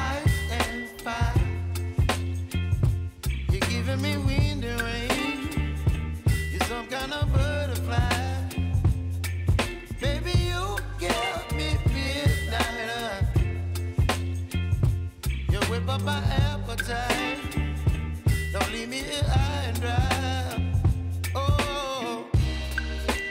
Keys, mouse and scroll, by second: 0.7 r, 2.0-2.6 typing, 4.6-6.6 drag, 7.1 space, 9.7 click, 11.1 Return, 12.0 click, 12.5 F9, 13.5 j, 14.2 space, 16.0 j, 17.0 space, 19.5 click, 21.0 s, 22.6-23.3 drag.